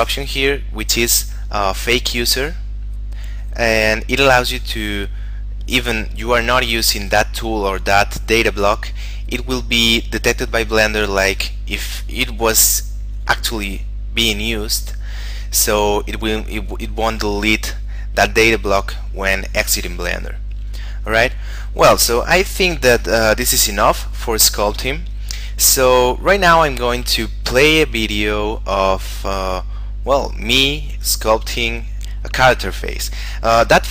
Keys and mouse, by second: 21.0 click.